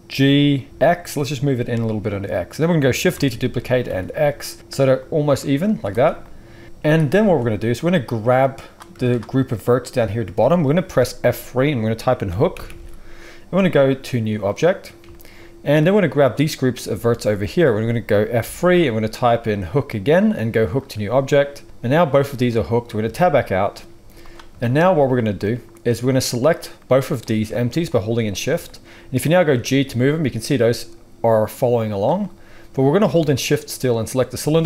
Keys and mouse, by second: 0.1 g, 3.1 shift+d, 5.6 z, 6.6 Tab, 6.7 z, 7.2 alt+a, 7.8-26.2 drag, 11.2 F3, 12.6 o, 14.2 o, 18.4 F3, 23.0 Tab, 23.9 z, 26.2-27.8 middle drag, 27.8 shift+click, 27.9-34.0 shift+middle drag, 29.4 g, 34.0 shift+click.